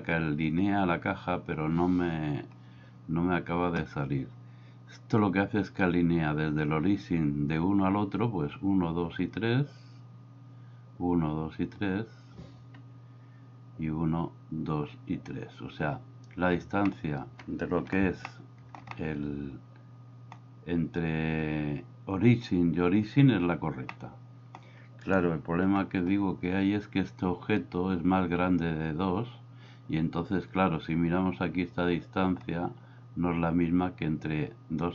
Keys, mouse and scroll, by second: 16.8-17.9 middle drag, 18.2-18.8 shift+middle drag, 19.0-20.3 middle drag, 23.9 middle click, 25.8 KP_1.